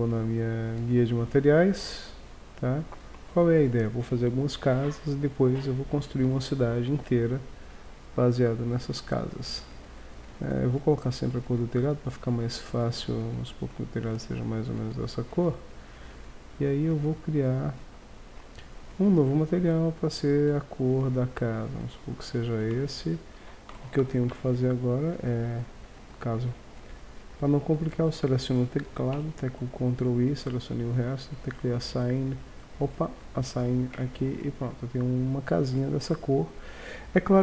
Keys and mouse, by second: 1.4-3.2 drag, 3.3-4.8 drag, 10.3-12.1 drag, 16.4-18.7 drag, 18.7-21.5 drag, 22.8 Tab, 23.7 ctrl+Tab, 25.5 click, 29.2 ctrl+i, 31.3 click, 33.1-33.6 drag, 33.9 click, 34.0 Tab, 34.5-35.2 middle drag, 36.1 KP_1.